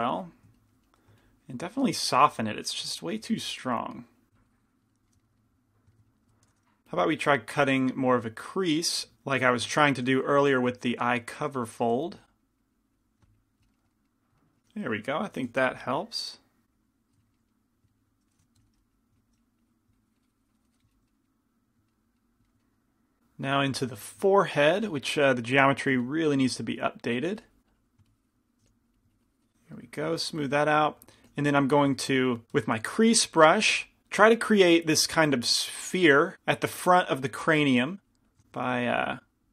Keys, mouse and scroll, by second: 0.1 click, 0.3 f, 2.1-5.2 drag, 2.2 shift+f, 3.5 i, 3.5 f, 6.6 shift+c, 6.6 shift+f, 7.8 f, 9.0-10.3 drag, 10.3 f, 11.4-14.3 drag, 12.2 f, 13.7-15.7 middle drag, 15.7 g, 15.7 f, 17.1 click, 18.7 i, 18.7 f, 18.8-21.0 drag, 21.0-26.2 middle drag, 25.0 f, 26.2 f, 26.2 i, 26.7-30.4 drag, 28.7 f, 30.2-33.0 middle drag, 30.6 f, 31.4 f, 33.0 shift+c, 33.0 shift+f, 33.8 f, 37.2 f, 38.0-39.5 drag, 38.6 shift+f.